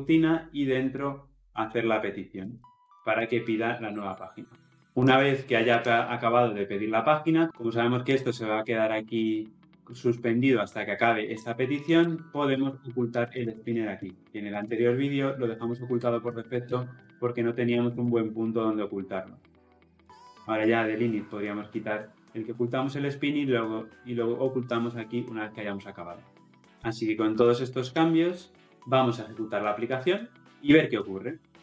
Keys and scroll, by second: 2.4 ctrl+x, 3.1 ctrl+v, 14.0 Return, 29.3 shift+F10.